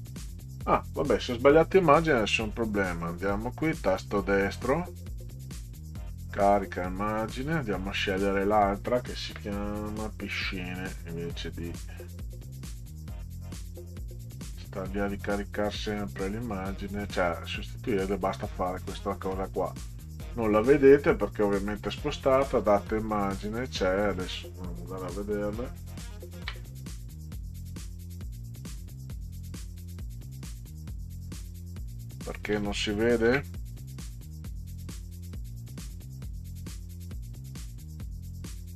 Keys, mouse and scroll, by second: 2.2 click, 2.4 click, 3.0 right click, 6.1 click, 11.4-15.7 drag, 16.4 click, 16.6 click, 20.6 click, 21.9 click, 23.6 click, 26.6 click, 26.7 l, 28.0 click, 28.2 click, 29.8 click, 33.3 ctrl+z, 34.8 click, 35.0 click, 35.7 right click.